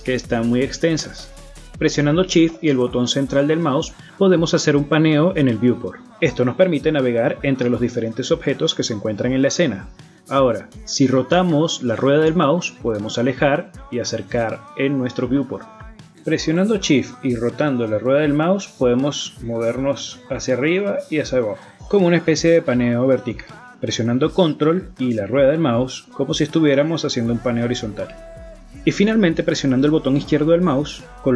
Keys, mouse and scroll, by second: 0.3 middle click, 2.5 middle click, 4.2 shift+middle click, 7.6 middle click, 8.7-9.1 scroll up 6, 9.4 shift+middle click, 10.6 shift+middle click, 13.1 shift+scroll down 4, 14.2-15.0 scroll down 9, 15.1-15.6 scroll up 9, 16.2-16.6 scroll down 3, 16.6 middle click, 17.2-18.0 scroll up 6, 18.0 shift+middle click, 18.8 shift+scroll down 1, 19.6-20.4 shift+scroll down 15, 20.4-21.8 shift+scroll up 28, 21.9-23.0 shift+scroll down 31, 23.0-24.0 shift+scroll up 28, 24.2 scroll down 2, 24.7-25.2 scroll up 1, 25.2 middle click, 26.5-27.3 ctrl+scroll down 7, 27.3-28.0 ctrl+scroll up 14, 28.3-29.0 ctrl+scroll down 13, 29.2-29.9 ctrl+scroll up 12, 29.9-30.4 ctrl+scroll down 11, 30.6-31.3 ctrl+scroll up 6.